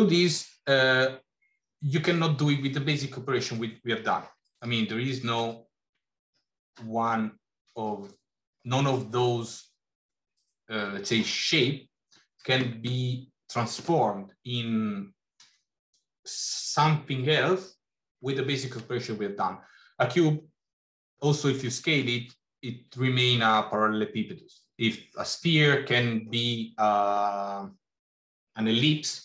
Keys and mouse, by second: 4.5 shift+a.